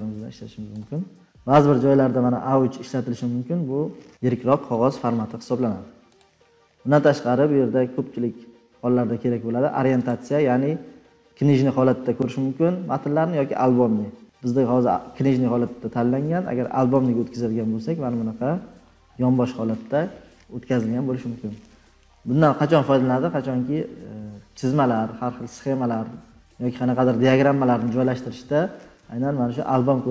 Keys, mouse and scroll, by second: 0.6-2.0 drag, 6.1-8.9 drag, 18.6 click, 18.8-19.8 scroll, 21.0 scroll, 21.4-24.3 scroll up 34, 24.3 scroll, 27.1 scroll, 29.3-29.8 scroll, 29.8 scroll down 8.